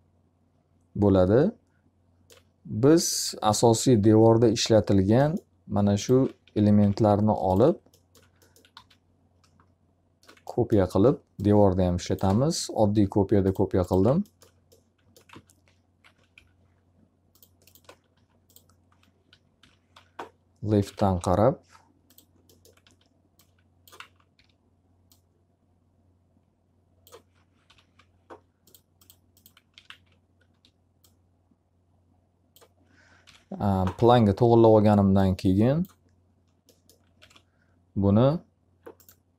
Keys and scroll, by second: 5.9 F3, 8.7 w, 14.8 alt+a, 16.3 F3, 18.1 d, 19.5 l, 20.6-21.4 typing, 22.7 w, 23.9 z, 24.3 e, 27.6 l, 29.4-30.4 typing, 33.1 l, 33.9 z, 34.3 w, 37.1 r.